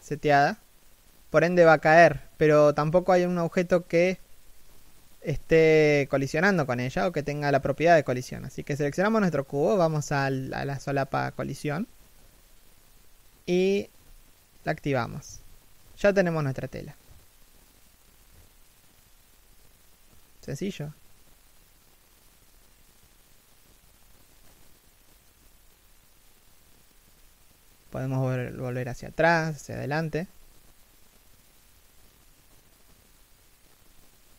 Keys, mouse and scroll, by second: 0.5 right click, 7.0 right click, 24.2 right click, 30.0 right click, 30.2 g.